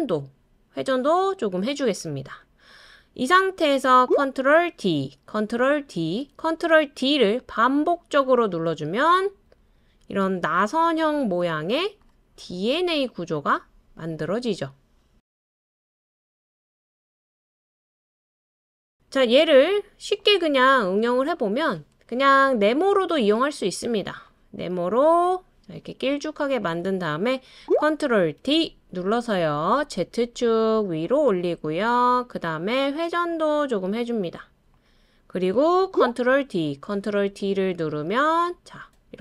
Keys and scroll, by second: 4.7 super+d, 5.8 super+d, 6.9 super+d, 7.4 super+d, 7.8 super+d, 28.4 super+d, 36.3 super+d, 36.9 super+d, 37.3 super+d.